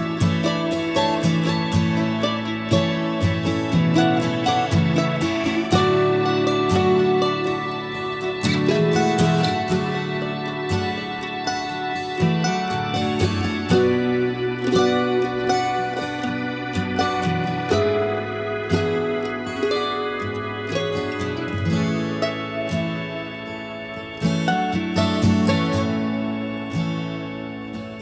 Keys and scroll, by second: 14.8 Delete, 19.8 s.